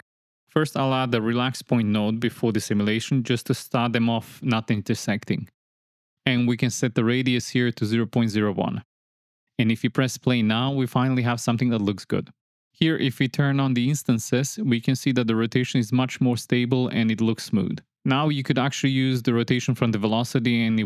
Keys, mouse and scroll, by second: 0.5 shift+a, 3.3-5.3 drag, 6.7 middle click, 7.5-8.6 drag, 9.5 space, 12.7 space, 12.8 click, 13.7 click, 14.7 m, 15.2 middle click, 16.1 space.